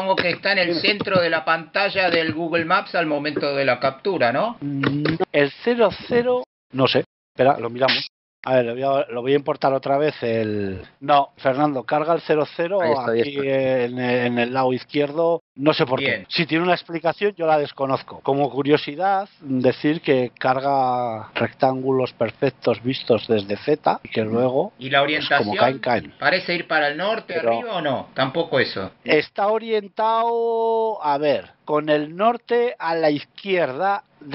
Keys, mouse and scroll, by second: 8.3 click, 8.3 x, 9.2 click.